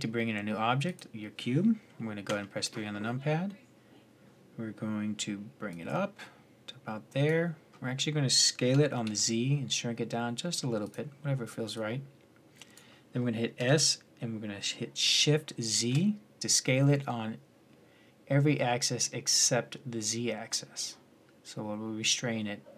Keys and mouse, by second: 2.1 KP_1, 5.5-7.5 drag, 7.5 middle click, 7.6-10.6 middle drag, 8.5 s, 11.5-13.4 drag, 13.4 s, 21.0-22.7 middle drag.